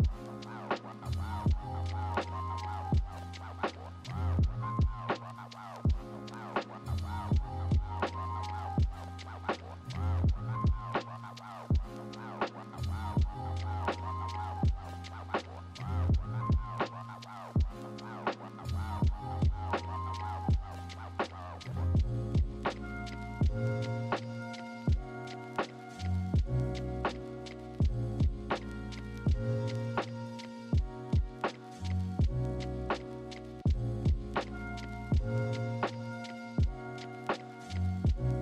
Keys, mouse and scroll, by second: 1.1 ctrl+-, 6.4 ctrl+=, 6.7 ctrl+-, 7.3 right click, 10.0 right click, 10.6 b, 11.0 ctrl+z, 20.3 ctrl+z, 20.6 ctrl+=, 21.7 right click, 23.3 right click, 23.9 right click, 26.7 right click, 27.2 right click.